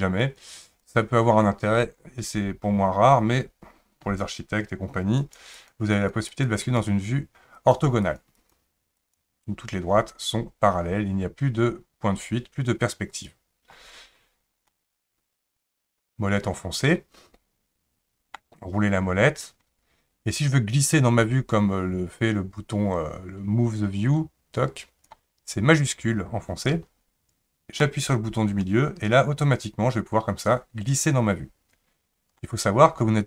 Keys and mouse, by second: 0.2 click, 0.8 click, 5.2 click, 5.5 click, 5.9 click, 6.3 click, 6.6 click, 7.5 click, 8.0 click, 8.3 click, 9.0 click, 13.1 click, 14.7-18.4 middle drag, 24.1 click, 27.9-32.4 shift+middle drag.